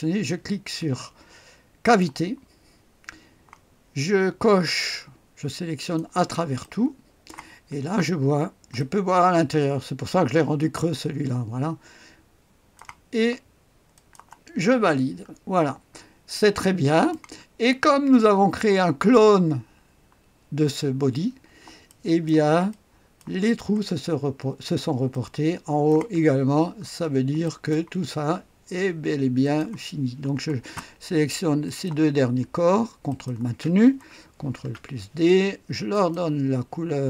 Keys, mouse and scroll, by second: 1.8 click, 4.9-6.5 drag, 6.6-7.8 drag, 7.8-8.8 scroll up 1, 8.8-13.2 drag, 13.9 click, 14.8-16.3 scroll down 1, 16.3 click, 17.1 right click, 17.5-18.3 scroll down 1, 21.8 right click, 22.7 click, 24.2-25.1 scroll up 1, 25.1 click, 26.2-27.1 scroll down 2, 27.4 right click, 29.4 click, 31.6 click, 33.1 ctrl+click, 34.5 ctrl+d, 35.9 click.